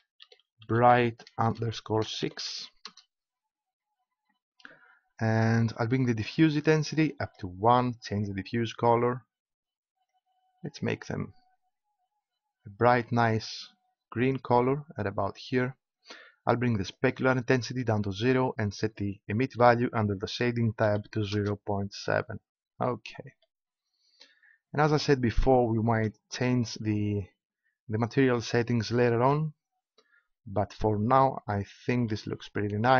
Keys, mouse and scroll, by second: 6.6-10.8 drag, 16.9-18.8 drag, 20.1 click, 22.4 middle click.